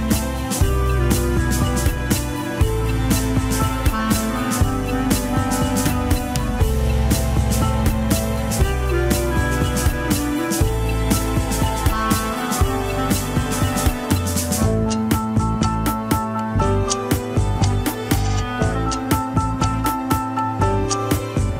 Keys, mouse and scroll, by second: 0.2 shift+middle click, 0.6 scroll up 2, 1.4 scroll down 2, 1.6 alt+z, 2.0 alt+z, 2.1 scroll down 3, 2.3 middle click, 2.8 click, 3.2 scroll down 1, 3.2 shift+middle click, 3.5 scroll up 2, 3.9 middle click, 4.3-4.6 scroll up 1, 4.6 ctrl+Tab, 4.8 click, 5.0 alt+z, 5.5 click, 5.7 alt+z, 6.1 ctrl+Tab, 6.1 click, 6.7 scroll down 2, 7.0 KP_7, 7.2 scroll up 3, 7.5 alt+z, 7.8 shift+middle click, 8.6 ctrl+s, 9.2 n, 10.7 click, 12.9 click, 13.9 scroll down 3, 16.0 ctrl+z.